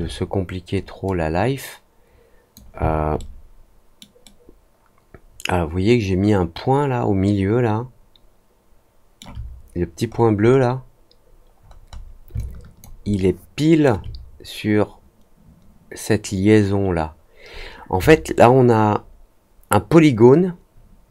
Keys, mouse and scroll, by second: 1.0-2.5 drag, 3.1 alt+middle click, 4.2-9.1 alt+middle drag, 10.0-10.5 scroll up 4, 11.5-12.0 scroll down 4, 12.3 alt+click, 13.0 alt+middle click, 18.3-21.1 alt+middle drag.